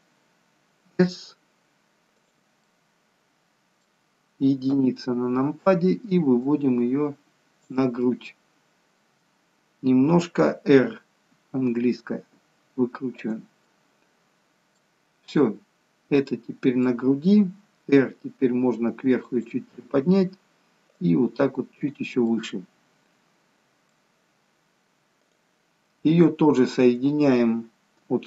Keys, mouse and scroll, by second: 4.6 KP_1, 6.5 click, 8.1 middle click, 13.7 middle click, 17.9 r, 21.9 click, 22.2 middle click, 26.3-26.8 scroll up 1.